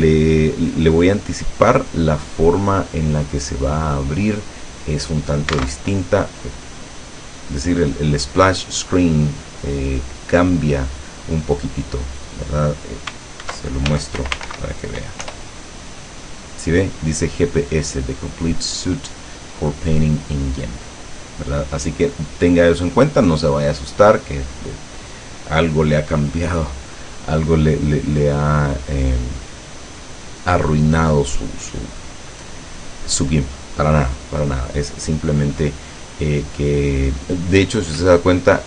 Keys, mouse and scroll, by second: 5.7 alt+Tab, 7.1 click, 13.5 alt+F2, 14.0 alt+g, 14.3 alt+i, 14.5 alt+m, 14.6 alt+p, 15.4 Return, 38.4-38.6 drag.